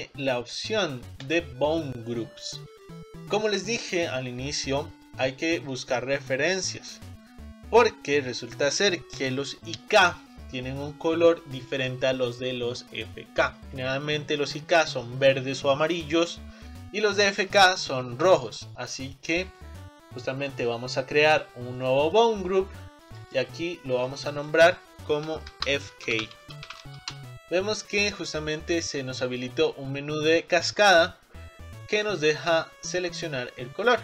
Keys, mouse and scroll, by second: 22.2-34.0 drag.